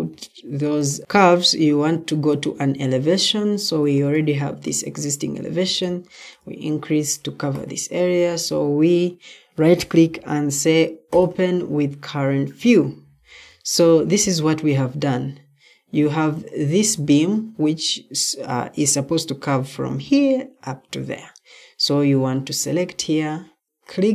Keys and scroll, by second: 14.0 Escape, 15.9 Escape, 23.6 Escape.